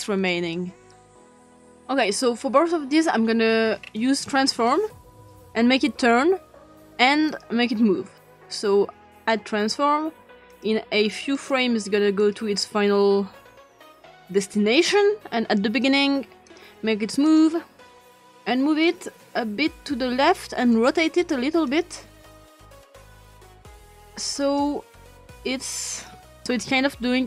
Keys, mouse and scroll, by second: 3.8-5.4 ctrl+scroll up 3, 4.7-6.0 drag, 6.1 click, 6.5 click, 8.1 click, 10.5 click, 11.4 click, 12.2 click, 13.7 click, 14.7 click, 15.8 click, 16.5 click, 17.3 click, 18.8-20.5 drag, 21.7 click, 24.5-26.1 drag.